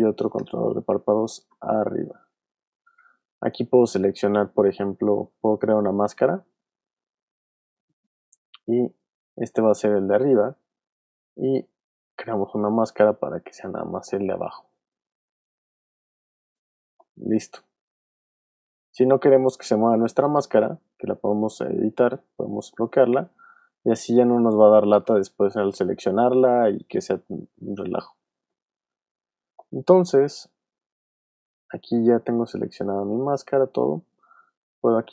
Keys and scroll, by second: 1.3-2.5 typing, 2.6 Return, 23.7 v, 24.5 shift+v, 25.1 shift+super+z, 26.1 super+z.